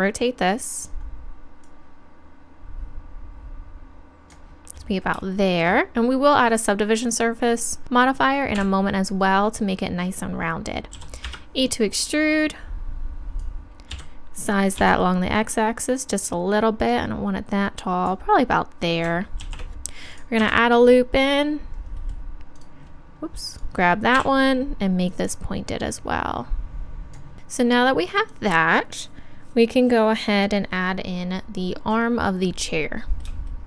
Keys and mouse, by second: 0.8-3.6 drag, 8.6 KP_1, 11.0 e, 12.1-13.9 drag, 13.9 s, 16.2-18.8 drag, 19.4 ctrl+r, 22.6-24.2 drag, 24.2 KP_1, 25.1-27.0 drag, 25.1-26.8 right drag, 27.3 a.